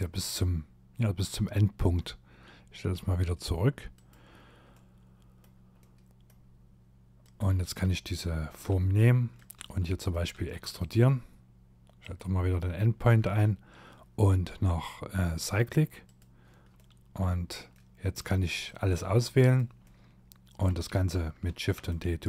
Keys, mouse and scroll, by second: 3.0 click, 3.7 middle click, 4.8 middle click, 6.2 click, 7.7 e, 8.6 e, 11.0 click, 15.1 click, 15.8 middle click, 16.8 middle click, 17.7 click, 18.8 middle click, 20.5 shift+d, 21.5 click.